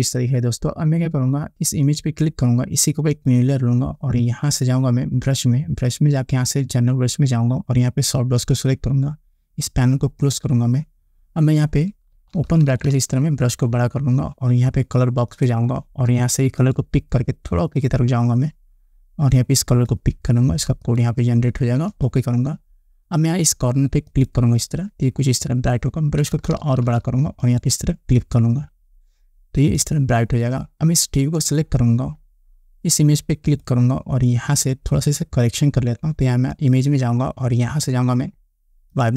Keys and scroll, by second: 12.6 ], 13.2 ], 26.8 ].